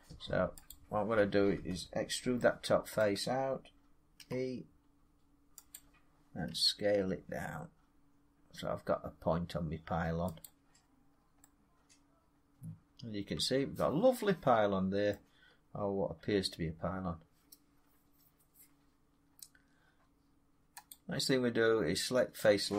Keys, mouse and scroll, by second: 2.9 middle click, 4.1 e, 5.7 click, 6.4 s, 6.9-9.5 drag, 10.2-11.0 drag, 11.0-12.5 scroll down 3, 14.9-15.5 scroll down 4, 15.0 middle click, 15.5 scroll up 2, 20.8 click.